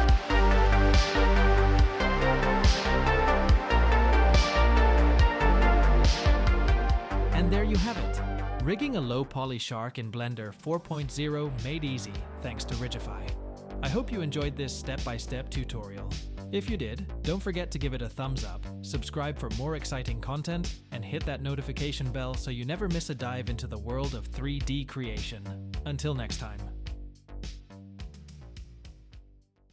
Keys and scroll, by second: 0.2 j, 1.6 Tab.